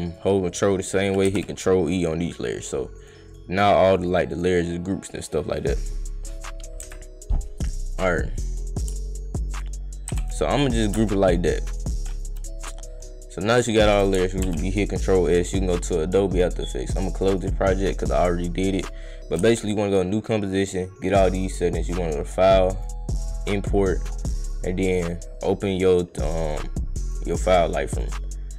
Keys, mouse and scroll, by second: 0.0 ctrl+click, 1.3 ctrl+e, 2.2 click, 2.6 click, 3.0 click, 3.3 click, 3.9 scroll down 2, 4.0 click, 4.3 click, 5.2 click, 5.9 click, 7.8 click, 8.3 click, 9.5 ctrl+click, 10.1 ctrl+e, 11.2 click, 11.7 click, 12.1 click, 14.4 ctrl+s, 15.2 click, 16.3 click, 17.3 click, 18.8 click, 19.5 click, 20.5 click, 21.3 click, 22.8 click, 24.4 click, 25.8 click, 27.0 click, 27.9-28.2 drag.